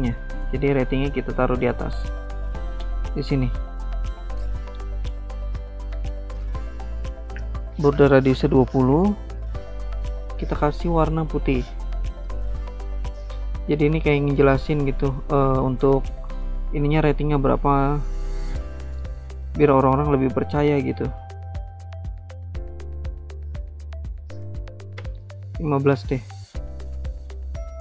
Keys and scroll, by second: 5.6-6.4 typing, 6.5 Return, 9.3-10.0 typing, 24.4-25.2 typing.